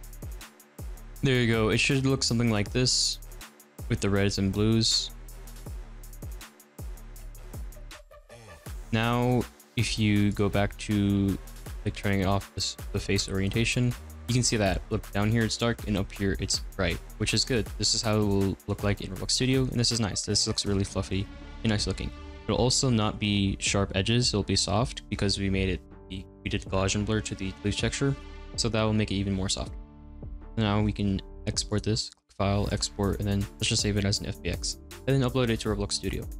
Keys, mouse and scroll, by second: 0.6-1.4 scroll down 2, 1.4-4.4 middle drag, 8.2-8.6 drag, 8.8-13.3 middle drag, 13.3-13.8 drag, 14.0-20.1 middle drag, 20.1-20.6 scroll up 3, 20.6 scroll down 5, 20.8 scroll up 6, 21.1 scroll down 5, 21.3-21.8 scroll up 5, 21.9 scroll down 2, 22.3-24.5 scroll up 2, 24.5-26.8 scroll down 3, 29.8 scroll down 3, 30.0 scroll up 4.